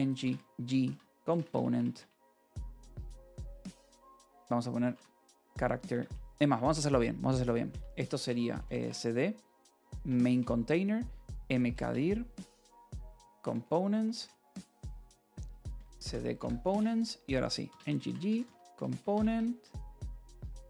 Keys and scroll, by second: 0.0-5.9 typing, 8.7-13.6 typing, 10.3 Return, 14.4 Return, 15.1-20.6 typing, 16.6 Return.